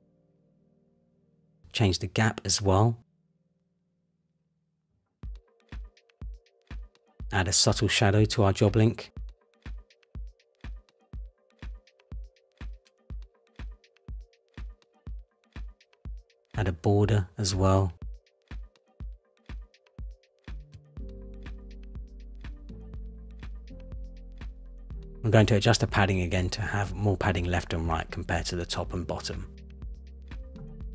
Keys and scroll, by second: 4.0 Up, 4.6 Up, 15.6 Return, 21.4 Return, 22.8 Return, 28.9 Return.